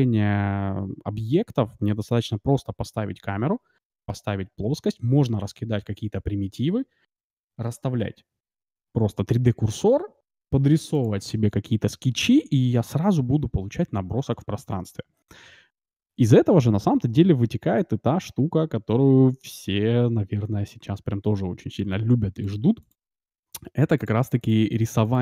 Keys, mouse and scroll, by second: 17.2-19.5 middle drag, 22.3-25.2 drag.